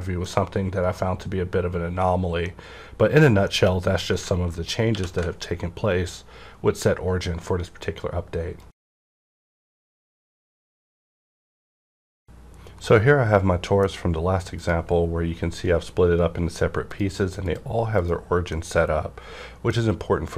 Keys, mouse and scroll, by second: 4.9 ctrl+alt+q, 14.6 click, 16.9 click, 18.4-20.3 middle drag.